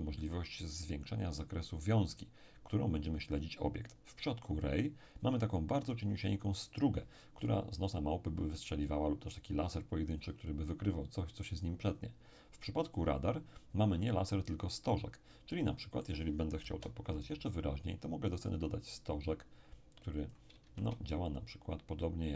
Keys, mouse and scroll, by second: 15.2-15.8 scroll down 1, 15.8-17.0 middle drag, 16.6 KP_7, 19.3-21.3 drag, 20.6 shift+a.